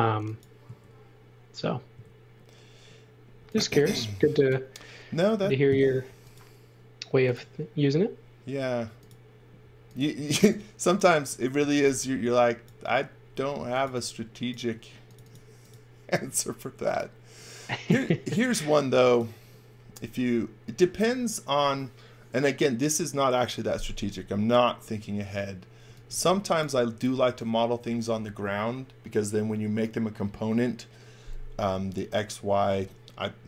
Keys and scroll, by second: 3.4-4.3 typing, 6.0 m, 9.8-14.6 typing, 16.1 s, 18.0 space, 25.8 x, 26.0 v.